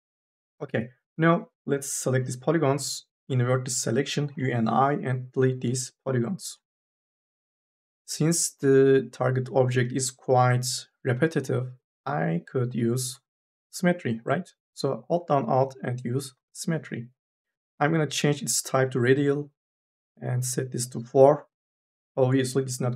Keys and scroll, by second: 0.1 3, 0.4 4, 0.9 3, 4.1 u, 4.6 i, 5.5 Delete, 6.6 4.